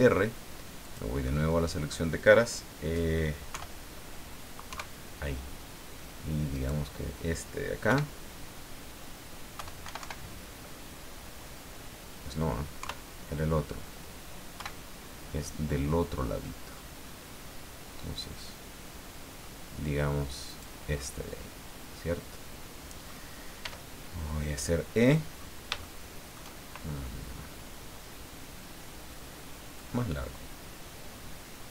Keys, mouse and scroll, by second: 0.8 click, 1.2 middle click, 3.5 KP_1, 4.7 KP_3, 6.5 right click, 7.8 KP_1, 9.5 KP_1, 12.8 KP_3, 14.5 KP_1, 16.4-19.6 middle drag, 20.5 right click, 21.0-23.2 middle drag, 23.6 e, 25.0 click, 25.8 shift+middle click, 29.7-31.7 drag.